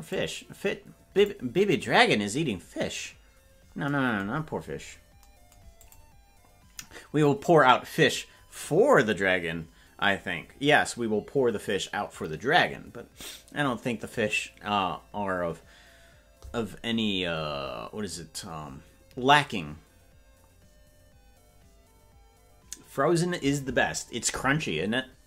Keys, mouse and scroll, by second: 0.1-1.3 drag, 4.5-5.0 scroll down 1, 5.0 scroll down 7, 5.9 click.